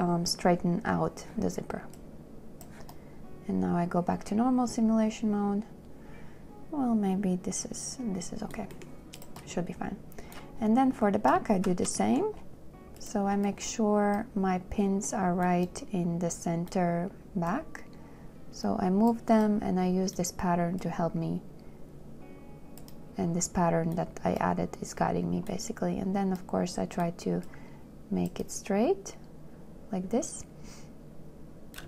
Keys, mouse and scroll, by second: 11.9 shift+w.